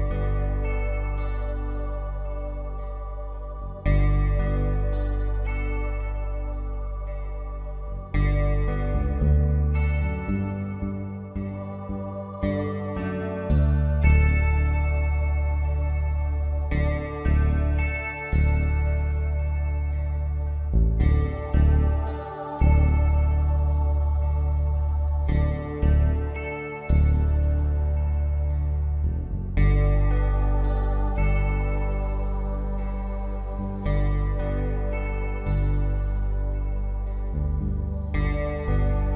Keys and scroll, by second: 0.1 Up, 1.8 Right, 2.5 Left, 11.9 b, 21.0 x, 23.2 ctrl+z, 24.9-25.2 typing, 28.9 x, 31.8 ctrl+z, 32.0 x, 35.7 v.